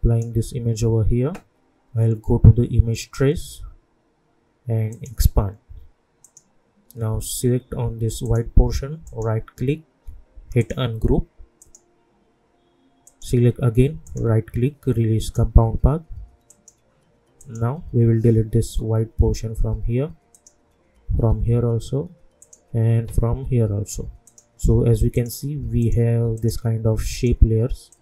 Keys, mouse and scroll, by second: 9.0 right click, 10.6 click, 14.0 right click, 15.2 click, 20.3 click.